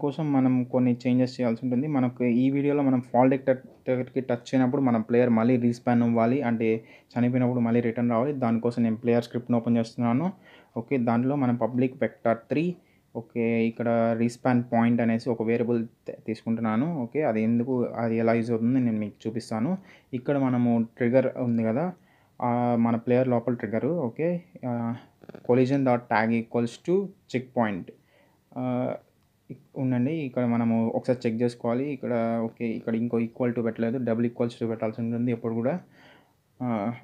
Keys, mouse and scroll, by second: 3.7 click, 5.8 click, 8.6-12.0 typing, 11.7 Return, 13.1-16.2 typing, 18.2 click, 18.8 scroll down 1, 20.9 click, 22.0 Return, 22.3-23.0 typing, 24.2-27.8 typing, 25.0 Return, 27.2 Return, 29.1 Right, 30.3 Left, 32.2 Right, 35.0 Left, 36.0 =, 36.4 Right.